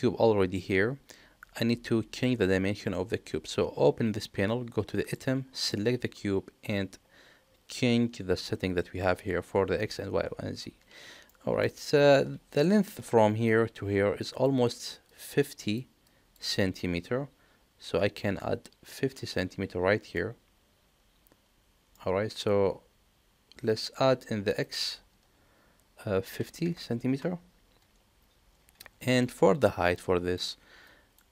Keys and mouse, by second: 2.1 click, 5.0 click, 5.6 click, 11.4 middle click, 20.2-21.9 middle drag, 23.7-28.3 drag.